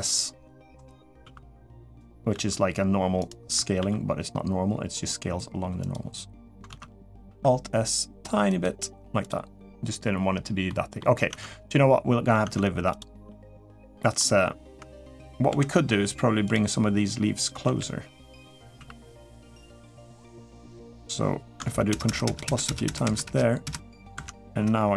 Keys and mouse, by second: 1.0 alt+s, 2.1 alt+s, 3.5 alt+s, 6.5 ctrl+z, 7.0 alt+s, 10.5 middle click, 11.1 Tab, 12.2 Tab, 13.0 middle click, 13.8 middle click, 14.8 click, 15.3 l, 16.3 click, 17.4 l, 18.5 3, 19.4 middle click, 21.7 ctrl+KP_Add, 21.8 ctrl+KP_Add, 23.9 ctrl+KP_Subtract.